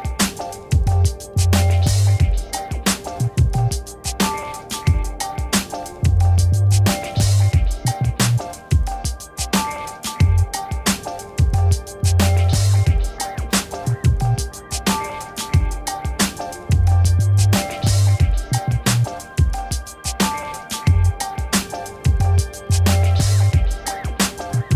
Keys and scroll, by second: 4.1 v, 6.6 ctrl+d, 7.2 v, 10.7 ctrl+shift+d, 11.5 m, 16.0 Right, 18.5 Left, 19.4 v, 21.8 ctrl+d, 22.4 t, 23.6 3, 23.8 Return, 24.5 ctrl+-.